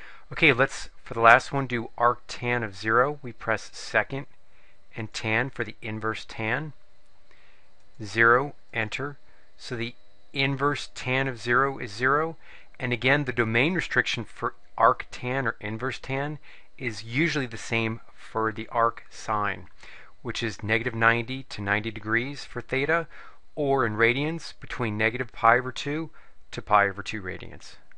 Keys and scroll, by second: 8.0 0, 8.8 Return.